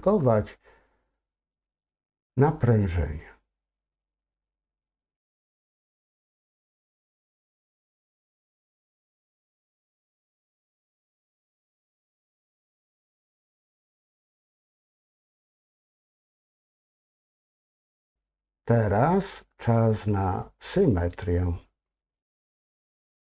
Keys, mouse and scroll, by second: 1.6-7.7 drag, 8.5-9.2 scroll down 2, 9.2 middle click, 11.5 click, 12.3-16.0 middle drag, 16.5-16.8 scroll down 2, 16.8 middle click, 22.2 click, 22.6 a.